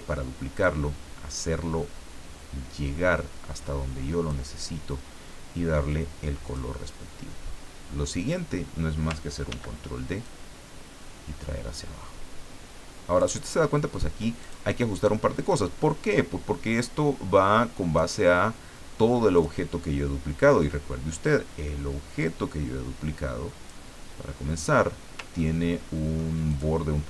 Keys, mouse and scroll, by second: 0.6-5.1 drag, 6.4 click, 9.5 ctrl+d, 10.2-13.3 ctrl+drag, 13.5 ctrl+scroll up 2, 14.4 ctrl+click, 15.5-18.3 drag, 19.3 click, 20.4-24.3 drag, 25.4-26.4 ctrl+middle drag.